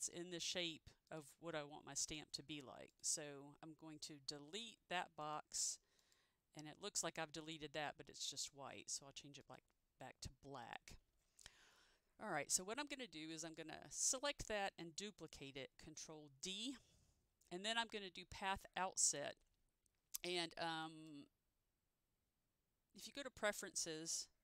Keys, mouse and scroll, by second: 2.2 click, 4.4 Delete, 5.3 click, 16.4 ctrl+d, 21.0 click, 23.2 click.